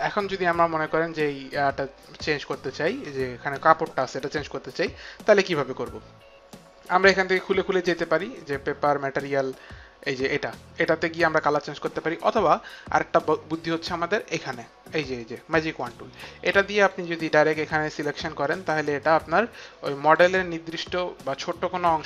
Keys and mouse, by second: 0.5 click, 10.0 click, 15.8 click, 16.8 click, 18.4 click, 20.9 click, 21.3 click.